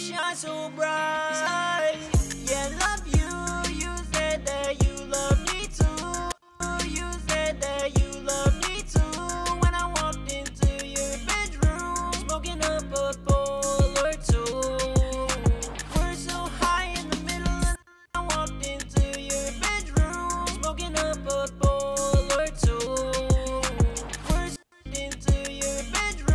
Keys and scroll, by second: 1.2 super+`.